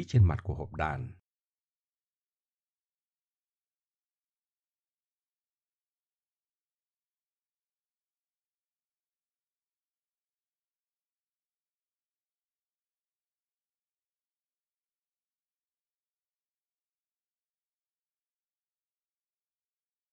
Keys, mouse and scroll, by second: 0.0 right click, 0.8 middle click, 2.1 middle click, 3.9 right click, 4.4 middle click, 6.1 KP_1, 6.7 z, 6.9 middle click, 7.0 middle click, 8.1 middle drag, 8.8 z, 10.2-11.7 middle drag, 12.0 typing, 12.3 middle click, 12.5 middle click, 13.1 KP_1, 13.2 KP_3, 16.0-16.4 middle drag, 17.4 middle click, 18.2-19.2 middle drag.